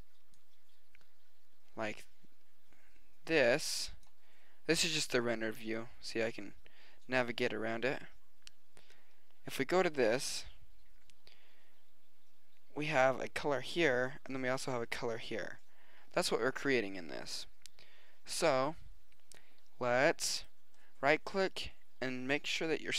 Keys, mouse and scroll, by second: 10.2 middle click, 10.9 middle click, 11.4 middle click, 12.0 middle click, 12.6 middle click, 13.2 middle click, 20.4-21.0 right drag, 21.0-22.8 middle drag.